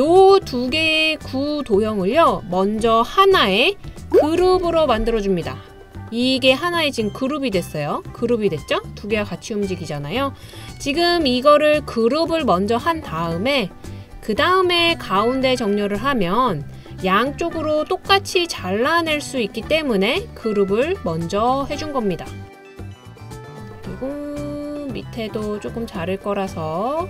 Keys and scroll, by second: 4.4 super+g, 11.0 super+z.